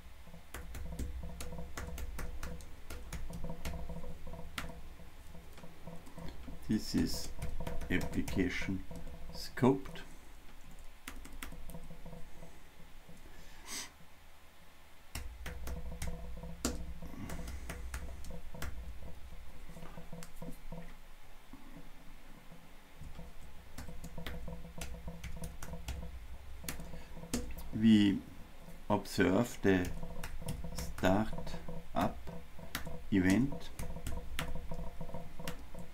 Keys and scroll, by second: 9.0 Return, 26.8 Return.